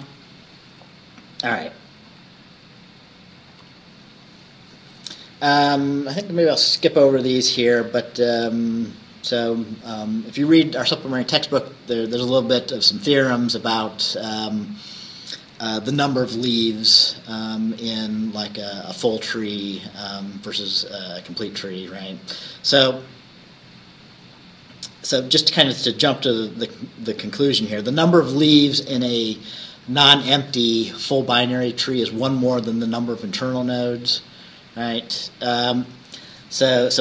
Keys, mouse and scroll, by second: 0.0 Right, 2.1 Right, 3.6 Right.